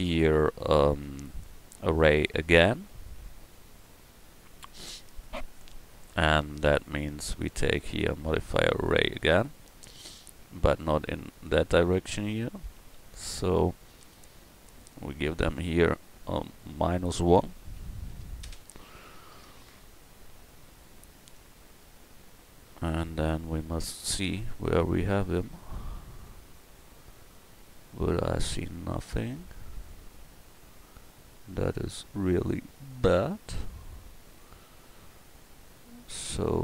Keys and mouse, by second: 1.1 middle drag, 8.9-21.3 drag, 30.7 middle click, 31.0 click, 31.6 middle click, 32.6 middle click.